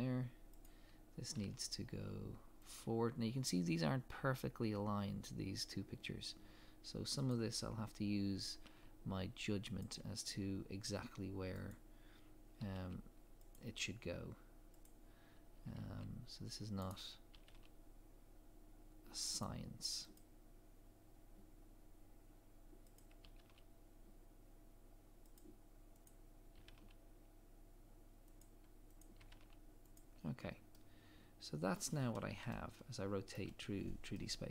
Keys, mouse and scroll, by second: 0.6 click, 1.4 g, 7.3 click, 8.5 g, 11.7 click, 12.6 g, 14.8 click, 15.6 g, 16.9 right click, 17.3 g, 20.2 click, 23.3 g, 26.1 click, 26.6 g, 29.0 click, 29.2 g, 30.3 scroll down 1, 30.7 middle click, 32.0 scroll down 1, 32.5 shift+middle click, 34.2 middle click.